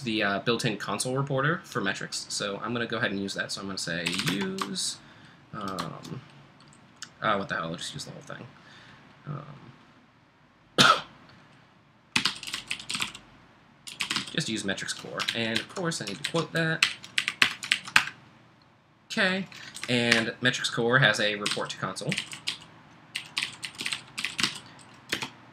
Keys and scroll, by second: 3.8-4.7 typing, 11.9-14.7 typing, 15.3 alt+Left, 15.6 alt+Left, 16.3 alt+Left, 16.8 ', 17.2 Right, 17.4 BackSpace, 17.7 super+Right, 18.0 Return, 19.8 Right, 20.1 (, 21.2-25.1 typing.